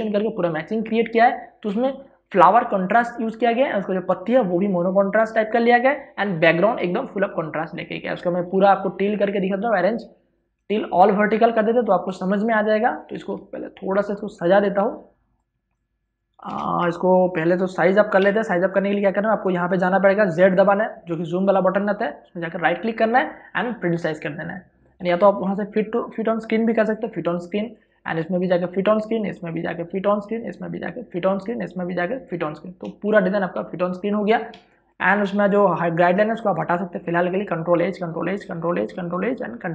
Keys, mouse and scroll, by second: 14.7 space, 15.1 click, 15.2 space, 16.2 click, 17.1 ctrl+click, 19.6 z, 23.7 right click, 25.3 click, 26.4 right click, 28.3 click, 29.1 right click, 29.9 click, 30.6 right click, 31.2 click, 31.7 right click, 32.5 click, 32.9 right click, 33.6 click, 35.9 v, 36.2 click, 38.4 ctrl+h, 39.0 ctrl+click, 39.1 ctrl+h, 39.6 ctrl+click.